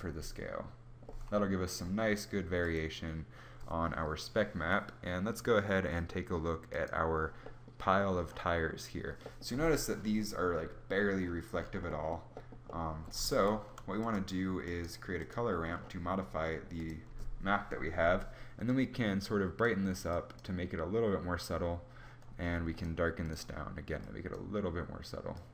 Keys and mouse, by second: 13.1 shift+a, 14.2 click.